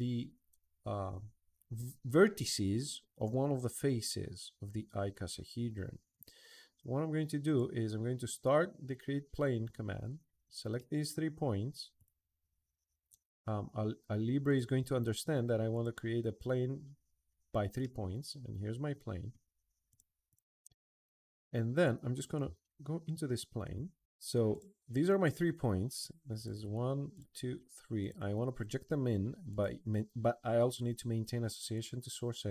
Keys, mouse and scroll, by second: 0.3-5.4 middle drag, 7.2 click, 8.0 click, 10.5-10.9 middle drag, 11.7 click, 14.2 click, 15.5 click, 17.5-18.8 middle drag, 19.0 middle click, 19.7 click, 20.1 click, 20.8 click, 21.0 click, 21.5 click, 23.8 middle click, 24.3 click, 26.1 click, 26.9 click, 27.8 click, 29.3 click, 31.5 click, 32.3 middle click.